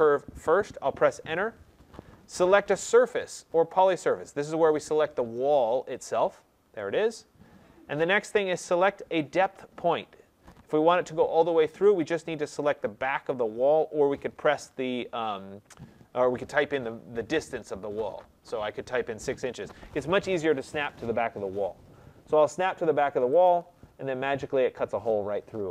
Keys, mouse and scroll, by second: 1.1 Return, 3.1 Return, 3.3 middle click, 3.5 middle click, 6.0 click, 23.3 click.